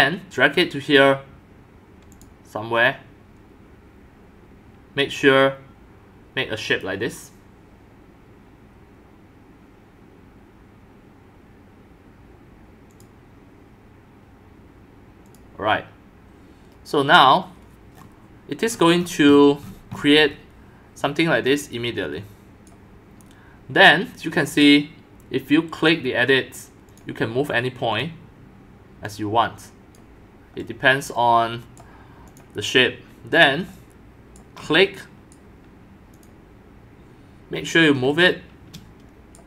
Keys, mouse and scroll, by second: 2.1 click, 6.7 click, 8.9-11.8 drag, 12.9 click, 15.3 click, 17.0-17.3 scroll down 1, 17.4 click, 17.9 middle click, 18.0-18.7 scroll up 7, 18.7-19.3 scroll, 19.7 scroll, 19.9-20.3 scroll down 15, 20.3-21.0 scroll up 3, 21.0-22.7 scroll up 1, 22.7-25.9 right drag, 26.9 click, 27.9-30.0 drag, 30.9-31.8 drag, 31.8 right click, 32.4-34.4 drag, 34.4-36.2 right drag, 36.5-39.1 drag, 39.3-39.4 drag.